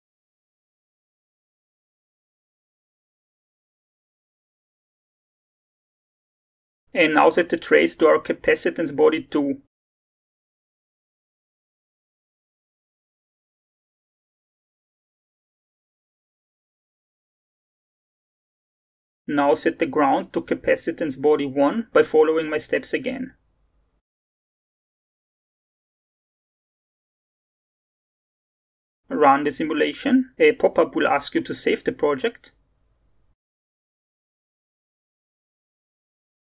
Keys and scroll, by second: 13.7 2, 17.4-18.7 typing, 22.9-23.7 typing, 27.0 1.